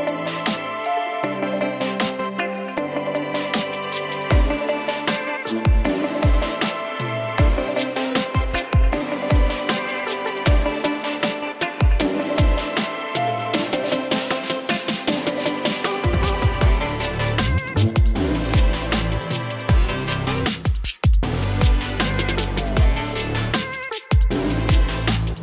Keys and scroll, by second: 7.9 ctrl+i, 13.6 alt+space, 15.3 o, 16.3-18.5 typing.